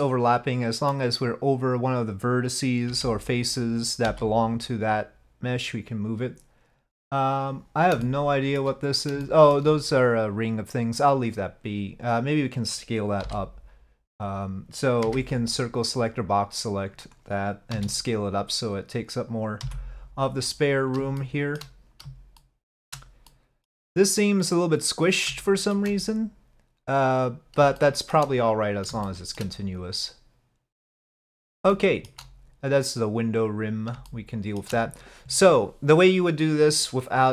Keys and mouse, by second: 0.3 click, 1.6 click, 2.9 l, 4.1 g, 8.1 shift+middle click, 9.3 shift+middle click, 12.2 click, 13.3 l, 15.1 c, 17.8 s, 19.7 g, 21.3 shift+middle click, 22.4 shift+middle click, 23.4 middle click, 25.6 shift+middle click, 27.9 shift+middle click, 29.1 shift+middle click, 31.8 shift+middle click, 34.1 shift+middle click.